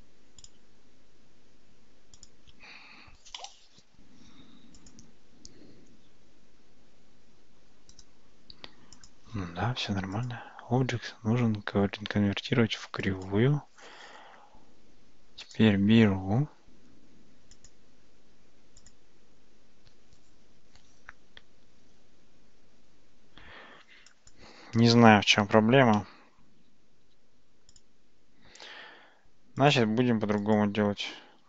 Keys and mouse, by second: 2.2 click, 4.9 click, 9.0 click, 10.2-13.3 drag, 17.6 click, 24.1-24.4 drag, 25.6 x, 27.1 x, 29.6 click, 30.5 click.